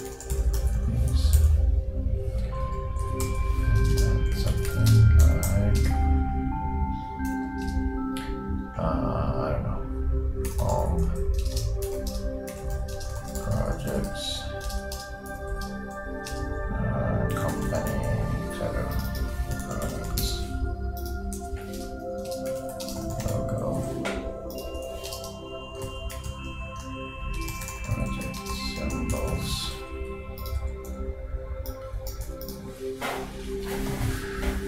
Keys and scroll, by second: 0.0 shift+i, 10.5 shift+h, 13.1 shift+space, 13.2 shift+p, 17.2 shift+space, 17.3 shift+c, 19.4 shift+p, 22.9 shift+space, 23.1 shift+o, 25.8-28.6 typing.